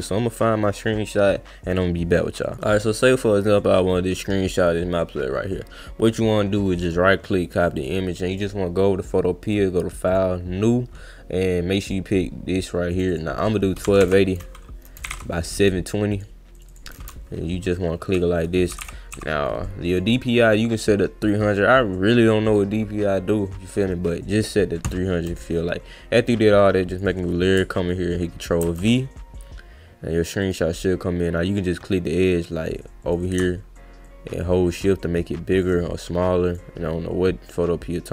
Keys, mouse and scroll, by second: 2.4 click, 6.8 right click, 7.8 click, 8.3 click, 9.5 click, 10.1 click, 11.8 click, 12.9 click, 13.1 click, 13.6-14.5 typing, 16.1 click, 16.5 click, 16.7 click, 18.8 2, 19.8 click, 22.4 click, 26.9 click, 28.6 ctrl+v, 30.4 click, 33.1 click, 34.1-35.6 shift+drag, 36.5 click.